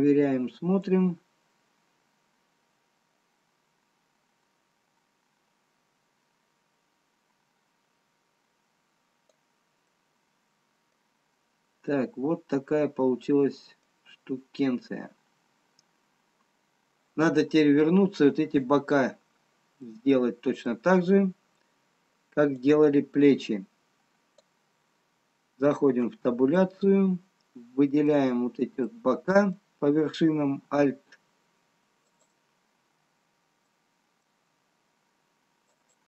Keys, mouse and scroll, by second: 1.5 click, 10.4 middle click, 11.7 scroll up 2, 13.1 middle click, 14.7 scroll down 1, 18.7 middle click, 20.0 middle click, 20.0 scroll down 1, 22.9 click, 26.4 Tab, 27.4 middle click, 29.7 middle click, 33.8 alt+click, 33.8 scroll up 2.